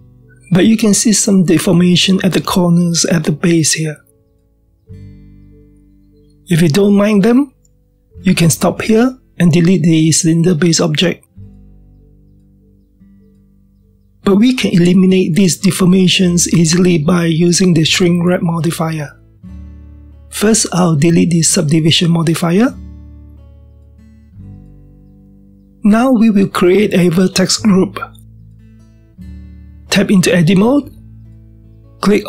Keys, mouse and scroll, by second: 3.1-7.9 middle drag, 3.1-5.3 scroll up 1, 7.9-8.5 scroll down 1, 8.5-12.5 middle drag, 12.5 click, 14.2 click, 15.2-24.4 shift+middle drag, 24.6-27.7 drag, 30.7 Tab, 31.5-32.2 middle drag.